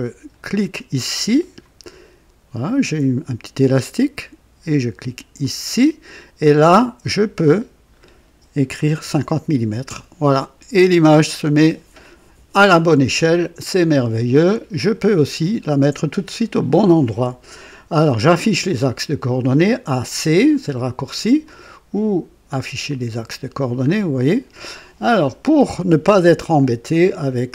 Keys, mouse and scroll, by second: 1.3 click, 5.3 click, 7.1 click, 8.6 KP_5, 8.7 KP_5, 8.9 KP_0, 9.8 KP_Enter, 14.7 click, 16.0-16.4 scroll down 2, 21.4 click, 22.8 click, 23.8 scroll up 1.